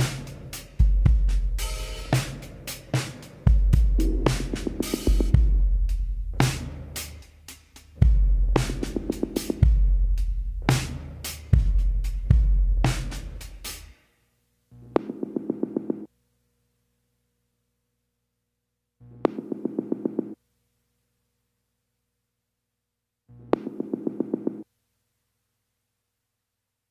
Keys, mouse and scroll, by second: 1.6 h, 2.3 alt+h, 2.8 click, 3.2 right click, 4.3 middle click, 4.5 h, 5.6-7.8 middle drag, 8.1 h, 8.7-10.5 middle drag, 10.1 click, 10.6 middle click, 11.3 click, 11.3 f, 12.5 click, 13.3 click, 14.1-15.5 middle drag, 15.5-16.4 drag, 16.5 click, 17.4-18.9 middle drag, 18.1 click, 18.9 f, 19.7 ctrl+z, 19.9-21.2 drag, 21.2 f, 22.0 middle click, 22.7 click, 24.0-25.2 middle drag, 25.4 click, 26.1 click, 26.7 click.